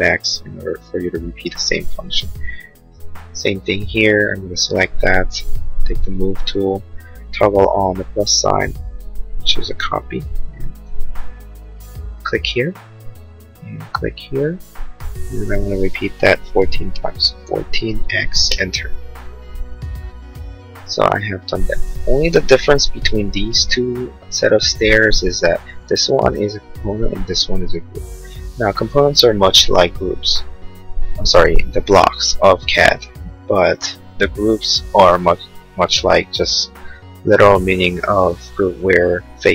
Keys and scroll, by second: 3.2 space, 16.8 1, 17.5 4, 18.1 x, 18.6 Return, 24.9 space.